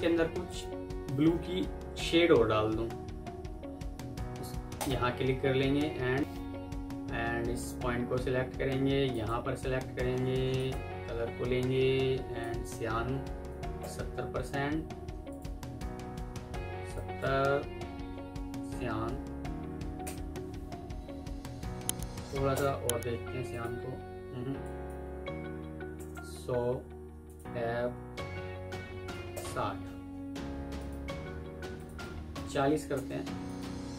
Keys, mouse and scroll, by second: 0.1 alt+scroll up 1, 1.8 F11, 6.2 F11, 13.4-13.7 typing, 21.9-22.7 typing, 25.4-26.1 typing, 27.2 Tab, 27.9 typing, 29.0 typing, 31.9 double click, 32.6 typing.